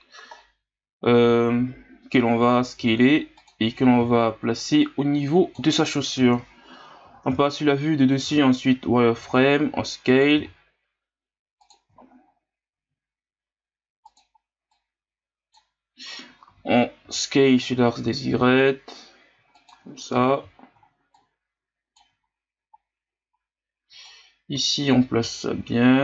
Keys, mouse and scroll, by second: 0.4 scroll down 3, 2.8 s, 4.1 scroll up 2, 4.8-6.1 drag, 6.1 KP_7, 7.0 z, 7.4 scroll down 2, 7.8 scroll up 3, 8.2 Tab, 9.2 s, 10.3 g, 12.0 scroll up 3, 12.7 s, 14.7-16.5 drag, 16.5 s, 19.9-20.6 scroll up 1, 20.6 scroll up 2, 21.1-22.2 drag, 22.2 scroll up 3, 24.0-25.2 drag, 25.2 s.